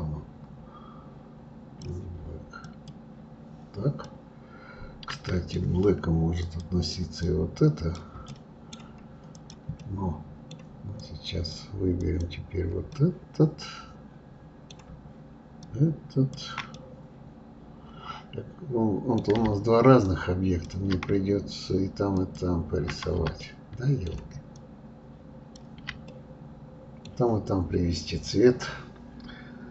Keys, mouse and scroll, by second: 2.6-4.0 drag, 4.0-6.4 middle drag, 6.4 click, 7.2-8.3 drag, 8.3-9.3 right drag, 9.3 click, 9.8-11.0 middle drag, 11.0 click, 12.0 click, 12.9-15.6 middle drag, 15.6-16.7 shift+drag, 16.7-19.7 middle drag, 20.1-23.4 ctrl+drag, 23.4-24.5 middle drag, 24.5-26.1 ctrl+drag, 26.1-29.1 middle drag.